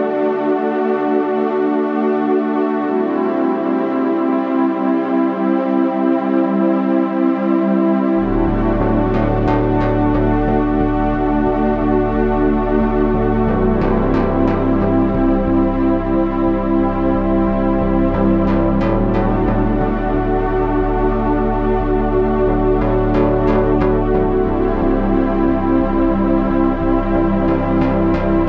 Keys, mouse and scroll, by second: 1.3 KP_1, 2.3-4.4 middle drag, 2.3 g, 6.4-12.8 middle drag, 22.1 g, 24.5 ctrl+r.